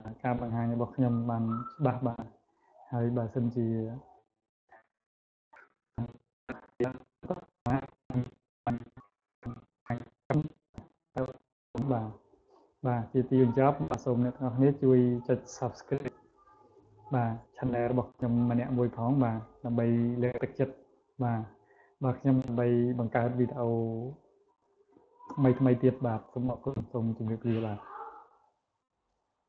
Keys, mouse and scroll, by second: 0.0 click, 0.4 click, 1.0 click, 1.7 click, 2.4 click, 3.2 click, 4.1 click, 6.1 click, 6.9 click, 7.3 click, 7.9 click, 9.8 click, 10.5 click, 11.0 click, 11.5 click, 12.2 click, 12.9 click, 13.4 click, 13.9 click, 14.3 click, 14.6 click, 16.8 click, 17.5 click, 18.1 click, 18.8 click, 19.5 click, 20.1 click, 20.6 click, 22.3 click, 23.0 click, 23.7 click, 24.4 click, 25.4 click, 25.9 click.